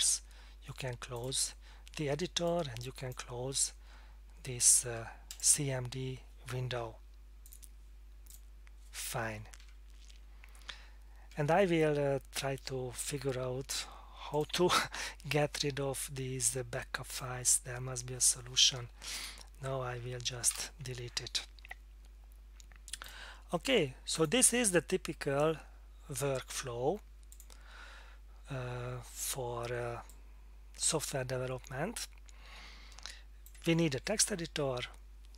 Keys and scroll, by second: 19.1 F8, 20.5 Return.